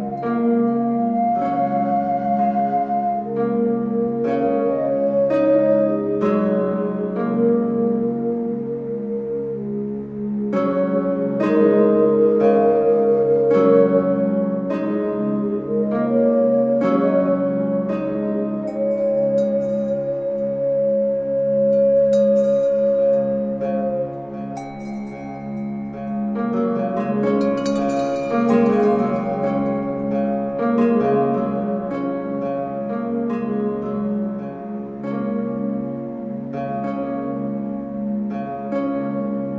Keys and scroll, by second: 0.6 ctrl+g.